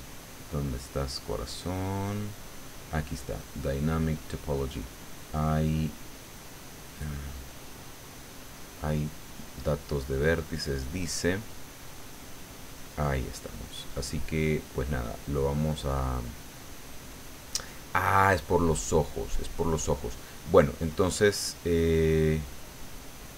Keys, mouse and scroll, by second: 1.4-2.7 drag, 3.4 click, 10.5 click, 11.7-13.0 drag.